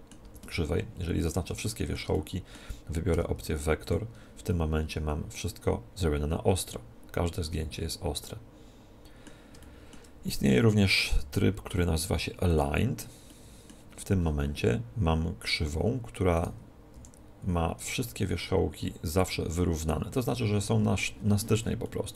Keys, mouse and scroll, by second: 0.1 a, 0.3 a, 3.0 v, 4.4-6.3 middle drag, 9.5 middle click, 10.2-11.9 right drag, 11.0 v, 13.2-16.2 middle drag, 16.2-18.2 right drag, 16.8 r, 19.0-21.0 drag, 21.7-22.1 middle drag.